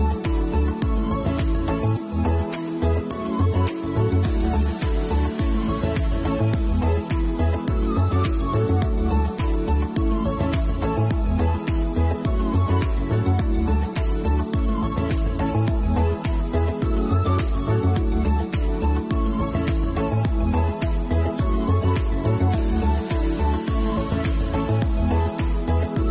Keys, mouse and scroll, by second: 1.6 middle click, 2.1-2.6 scroll up 2, 2.5 middle click, 6.4 ctrl+b, 14.7 click, 20.4 middle click, 21.0 ctrl+z, 22.3 ctrl+b.